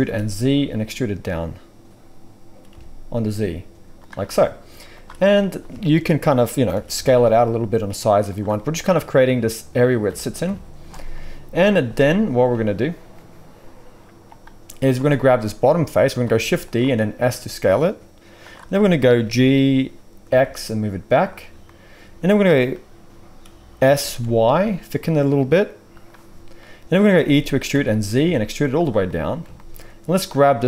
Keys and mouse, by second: 4.9 drag, 5.2-16.1 middle drag, 6.7 s, 10.4 KP_5, 16.4 shift+d, 17.2 s, 17.6 middle click, 19.2 g, 23.8 s, 27.1 e.